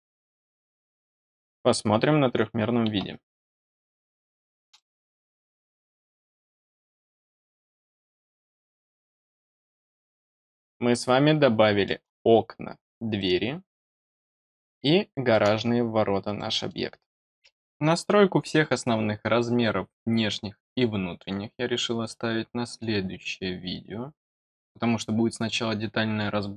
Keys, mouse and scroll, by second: 3.7-4.2 scroll down 2, 4.7 middle click, 7.5 scroll down 2, 7.9 middle click, 9.2-11.8 middle drag, 13.1 middle click, 14.0-15.2 middle drag, 16.3 middle click, 18.4-26.5 middle drag.